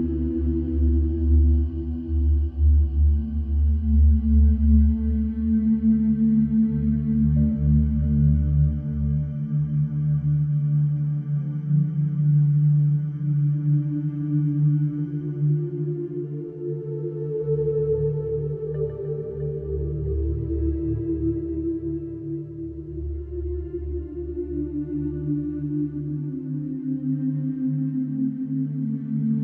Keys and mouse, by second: 0.3 ctrl+KP_Add, 1.2 shift+middle drag, 6.9 ctrl+b, 8.2 Escape, 8.5 Tab, 20.5-23.3 middle drag, 26.1 Tab, 28.4 shift+d, 29.0 y.